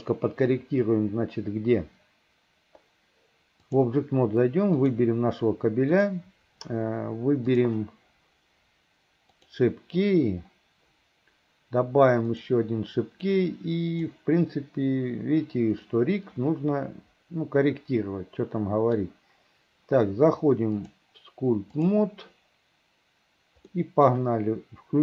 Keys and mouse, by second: 4.9 click, 6.1 click, 9.5 click, 12.6 click, 13.6 right click, 16.0-19.1 middle drag, 20.9-22.2 right drag, 23.8 middle click.